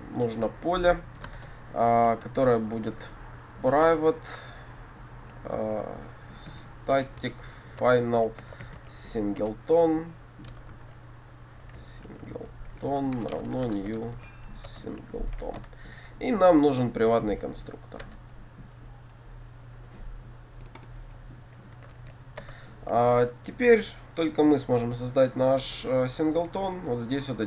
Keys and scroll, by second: 1.4 Delete, 2.0 shift+Return, 3.9 Return, 14.7 Return, 17.2 alt+Insert, 22.5 Return.